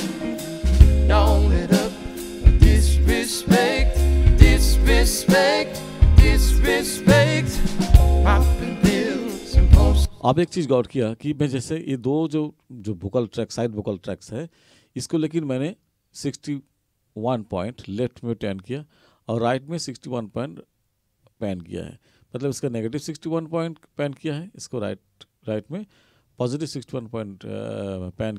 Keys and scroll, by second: 10.1 space.